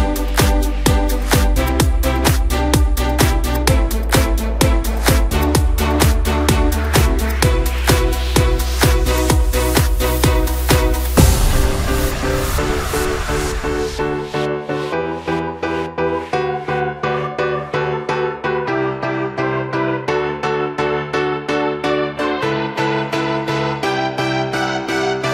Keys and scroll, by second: 10.3 Return.